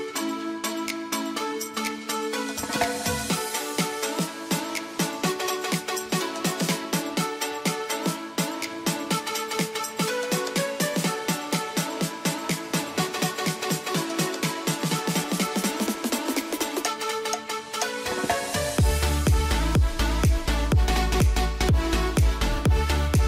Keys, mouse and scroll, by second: 0.1-1.5 right drag, 1.5 click, 1.9 F3, 3.1-4.8 drag, 6.8 click, 8.0 right click, 8.8 click, 11.4 F12, 12.6 click, 18.6 4, 19.1 Return, 20.0 click, 20.9 F2, 21.0 click, 22.2 alt+click.